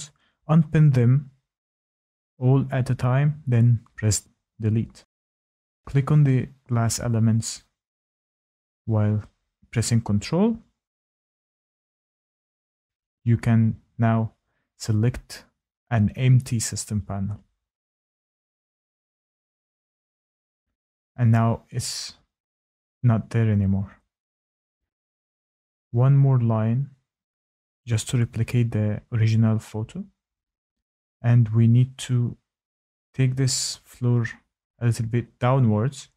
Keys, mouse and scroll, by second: 0.8 click, 1.8 click, 2.6 Delete, 4.9 Tab, 5.4 click, 6.7 ctrl+click, 7.9 Tab, 8.5 ctrl+click, 9.5 Tab, 9.9 Tab, 10.3 Tab, 11.3 ctrl+click, 16.6 click, 19.1 click, 20.3 click, 21.9 middle click, 23.9 Tab, 24.5 Tab, 25.5 click, 26.0 Tab, 26.1 Tab, 26.2 ctrl+click, 26.2 Tab, 26.4 ctrl+click, 26.4 Tab, 26.5 ctrl+click, 26.6 click, 26.7 click, 26.8 click, 26.8 click, 26.9 Delete, 27.0 Tab, 27.1 Tab, 27.2 Tab, 27.2 click, 27.3 Tab, 27.4 click, 27.5 Tab, 27.5 Tab, 27.6 Tab, 27.7 ctrl+click, 27.7 Tab, 27.8 ctrl+click, 27.9 Tab, 27.9 ctrl+click, 28.1 click, 28.1 click, 28.3 click, 28.3-30.0 scroll down 5, 31.1 click, 33.4 middle click, 34.9 click.